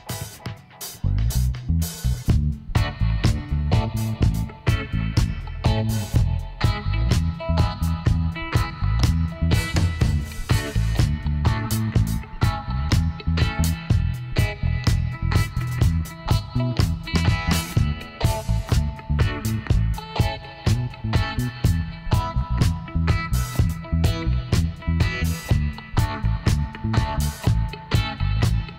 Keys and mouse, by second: 1.0-2.5 drag, 1.4 g, 2.5 right click, 3.4-4.9 right drag, 3.8 g, 6.2 middle click, 6.8 click, 7.2 middle click, 7.5 click, 8.7 click, 9.6 middle click, 10.4-11.9 drag, 11.9 middle click, 12.3 click, 12.8 middle click, 15.0 a, 15.6 a, 16.6 w, 20.0 KP_7, 20.4 middle click, 21.3 z, 21.7 middle click, 23.1 ctrl+r, 25.6 g, 28.5 s.